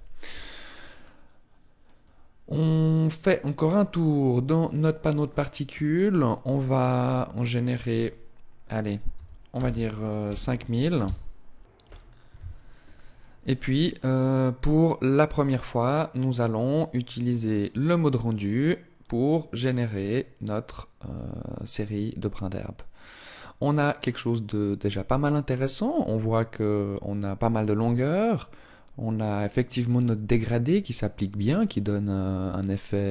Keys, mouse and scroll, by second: 1.6 click, 6.6 click, 15.8 click, 22.6 scroll up 1, 31.2-31.8 scroll down 1.